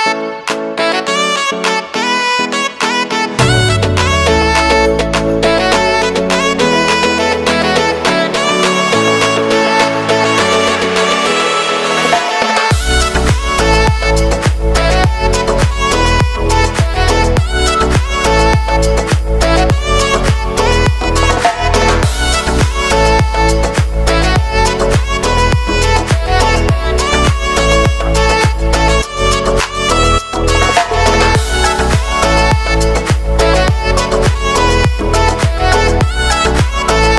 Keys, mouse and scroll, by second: 0.1 l, 1.4-2.1 typing, 3.4 click, 6.3 ctrl+alt+Home, 7.8 click, 9.9 s, 10.8-13.4 drag, 20.7 click, 21.5 ctrl+y, 23.2 click, 24.4-25.5 typing, 26.1 ctrl+a, 27.0-28.3 typing, 29.0 click, 29.0 click, 35.8 click.